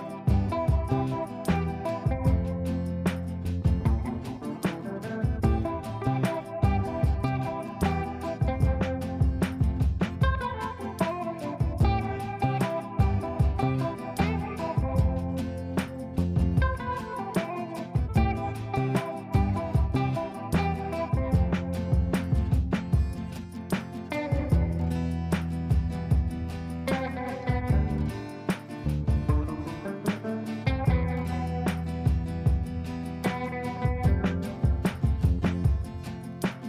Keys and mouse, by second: 0.2 click, 2.4 F2, 2.9-4.2 drag, 6.3-7.5 drag, 12.4 ctrl+click, 18.9-19.8 click, 26.1 click, 28.4 shift+m, 35.7 shift+i, 36.2 shift+u.